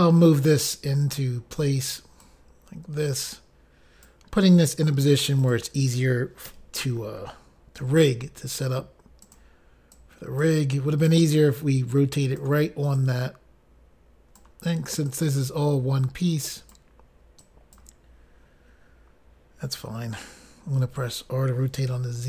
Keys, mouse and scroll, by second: 0.8 click, 2.4 click, 3.1 click, 5.7 click, 6.7 click, 6.7 i, 7.2 l, 8.0 r, 9.5 click, 9.6 click, 10.2 click, 11.3 click, 13.2 click, 15.3 click, 17.7 click, 22.1 r, 22.1 z.